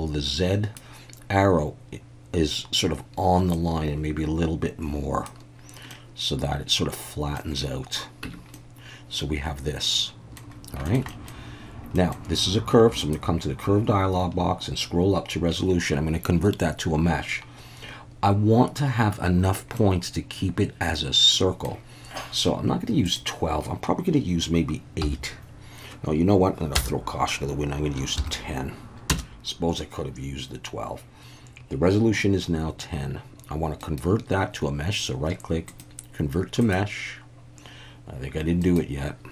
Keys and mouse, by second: 3.6-5.2 drag, 5.9-7.4 middle drag, 8.2 Tab, 8.5-10.4 middle drag, 10.9 middle click, 11.1 middle click, 11.9 middle click, 13.0 click, 19.8-21.6 middle drag, 23.1-29.8 drag, 33.9-36.7 right drag, 38.6-39.3 right drag.